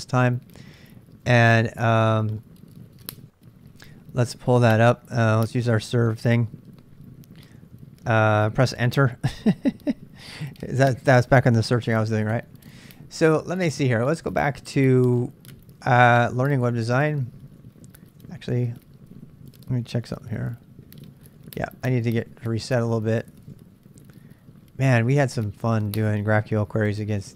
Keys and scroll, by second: 4.7 Tab, 7.3 ctrl+b, 7.5 ctrl+k, 7.7 ctrl+k, 12.1-13.4 typing, 15.9-26.1 typing.